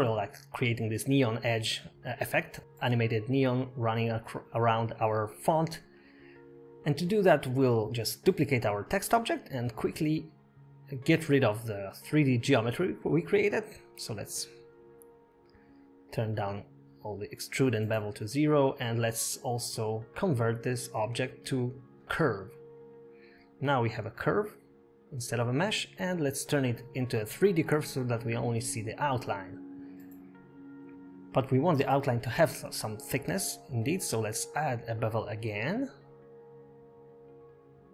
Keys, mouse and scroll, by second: 3.3 middle click, 4.8-5.9 scroll down 8, 6.1 middle click, 6.4 scroll up 2, 6.8 KP_0, 8.1 click, 9.0 scroll up 1, 9.4-9.8 scroll down 4, 10.6 middle click, 12.7 shift+d, 15.8 click, 16.3 click, 16.9 click, 17.4 click, 17.9 click, 18.5 click, 18.9 middle click, 18.9-19.2 scroll up 4, 19.9 click, 23.3 middle click, 23.5 Tab, 23.8 middle click, 24.6 middle click, 26.2 Tab, 27.0 click, 27.4 middle click, 27.6 Tab, 28.6 middle click, 29.6 Tab, 33.3 click, 35.1-36.4 scroll down 5.